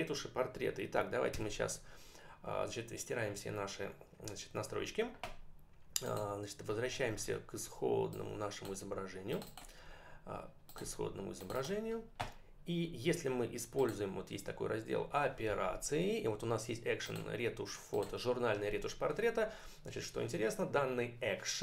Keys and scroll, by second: 1.3 Delete.